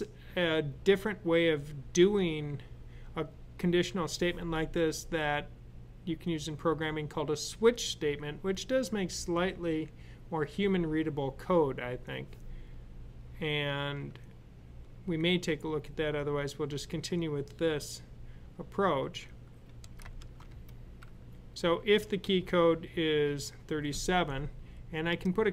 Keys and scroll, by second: 20.0 typing.